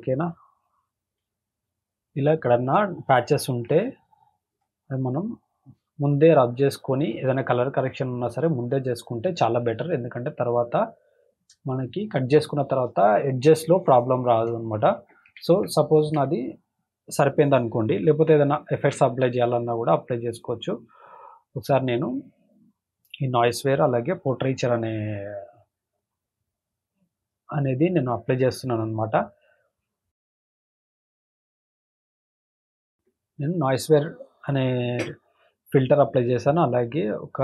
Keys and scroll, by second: 1.0 space, 2.7 space, 3.2 space, 10.8 space, 15.8 ctrl+-, 18.8 alt+t.